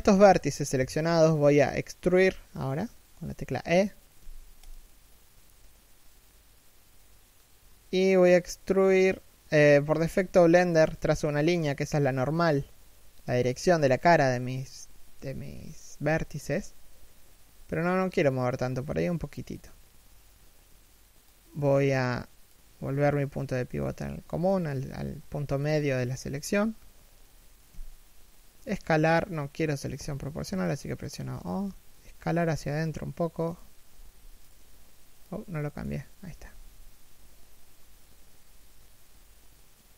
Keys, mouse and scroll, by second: 3.6 e, 27.3 s, 36.1 s.